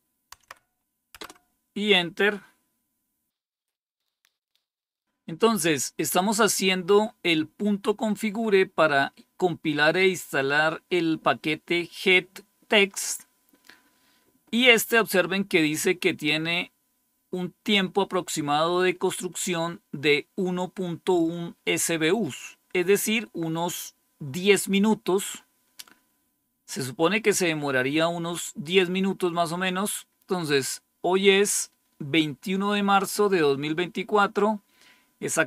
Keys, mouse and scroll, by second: 0.2 Tab, 1.0 Return, 19.4-21.1 drag, 21.2 click.